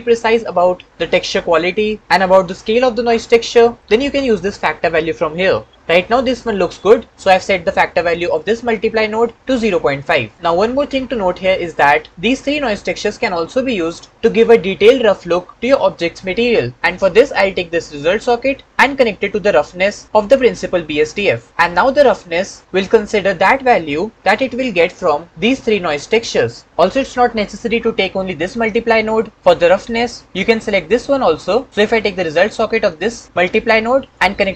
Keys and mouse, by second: 18.7-20.2 drag, 34.1-34.5 drag.